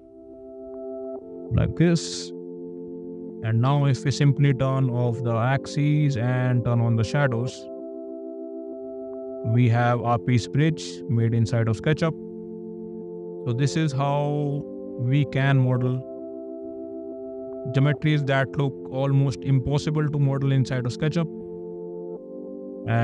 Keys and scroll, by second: 2.2 space.